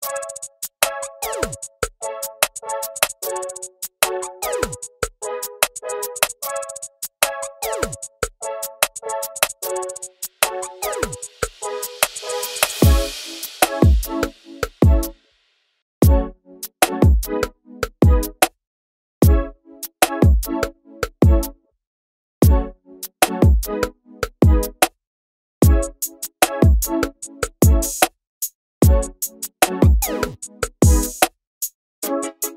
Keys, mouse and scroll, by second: 17.5 ctrl+space, 18.1-18.8 scroll down 2, 18.8 scroll down 2, 25.7 ctrl+b, 26.9-27.5 scroll up 4, 27.7 alt+a, 27.9-28.7 scroll down 2, 28.7 click, 29.7 KP_Decimal, 30.5-32.3 scroll down 14, 32.3 scroll up 4.